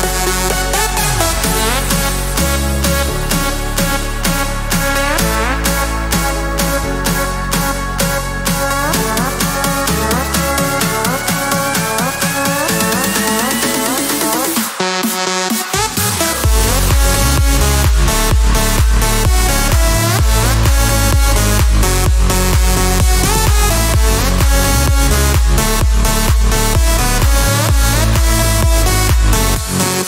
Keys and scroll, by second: 8.9-10.5 typing, 19.1 Escape.